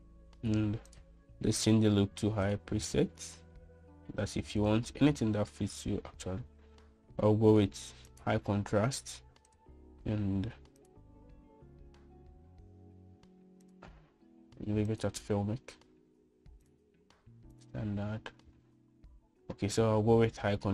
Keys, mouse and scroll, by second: 0.0 click, 2.2-3.8 drag, 5.8-9.4 drag, 10.8-12.2 drag, 14.9-16.2 drag, 17.9-18.8 drag.